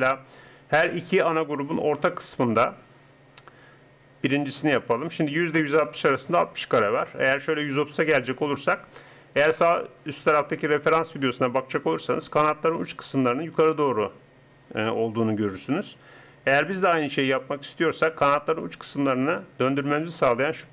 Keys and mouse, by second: 20.1-20.7 drag.